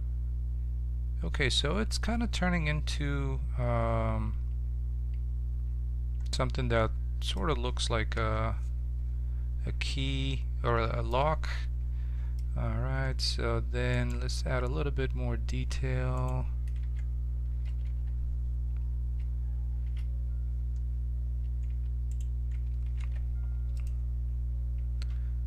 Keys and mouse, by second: 8.1 KP_7, 13.9-15.8 right drag, 16.1-17.8 right drag, 16.8 Tab, 17.6 a, 17.8 a, 19.8 shift+s, 21.6 Tab, 22.0-23.9 drag, 22.5 Tab, 23.0 ctrl+Tab.